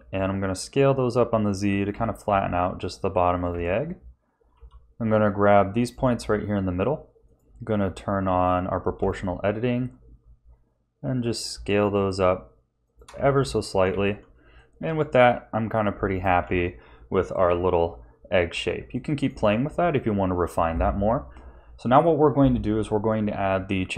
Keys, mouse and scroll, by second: 0.0 s, 1.9 g, 3.5 a, 4.5 b, 7.2 click, 9.0 s, 13.1 a, 13.4 Tab, 13.8 z, 14.5 middle click, 16.4 ctrl+s, 17.3 KP_1, 18.9 shift+middle click.